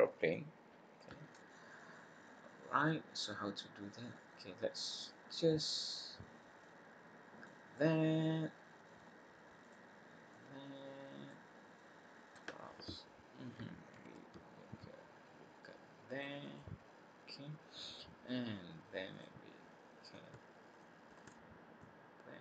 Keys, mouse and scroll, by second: 1.0 middle click, 4.9 click, 5.6 click, 6.6 click, 7.7 middle click, 9.6 click, 10.3 click, 11.5-12.0 scroll up 2, 13.9 ctrl+r, 19.1 click, 20.0 click, 20.6 shift+click, 21.2 click, 21.7 click.